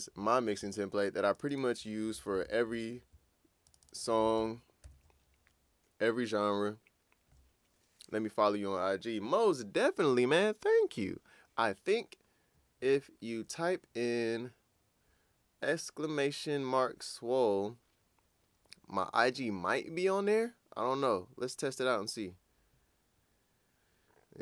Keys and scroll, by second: 2.4 super+`, 4.8 super+`.